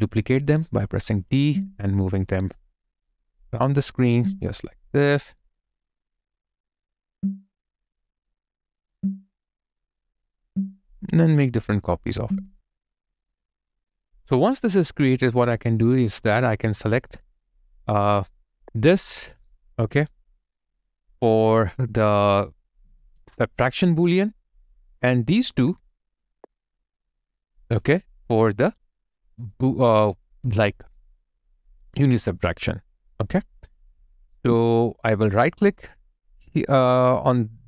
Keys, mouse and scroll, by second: 12.6 /, 25.4 shift+click, 34.2 ctrl+z.